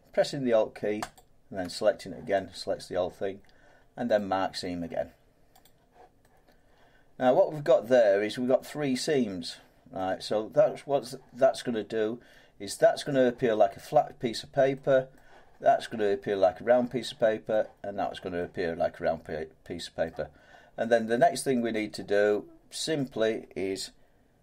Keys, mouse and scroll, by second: 1.1 alt+click, 4.1 right click, 5.6 click, 9.4 click, 9.9-18.7 middle drag, 20.0 middle click, 20.4-20.8 scroll down 8, 21.6 middle click, 21.9 scroll down 1, 21.9 scroll down 1, 22.1 scroll down 1, 22.9-24.4 middle drag.